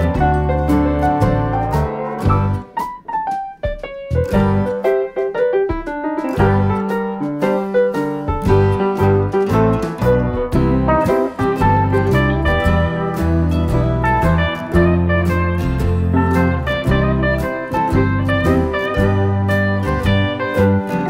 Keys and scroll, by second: 0.8 F1, 1.5-2.2 typing, 3.4 +, 4.4 shift+F6, 11.2 F1, 12.1 F7, 12.6 F1, 13.1 typing, 15.2 F1, 15.8 space, 16.6 space, 17.6 shift+F6.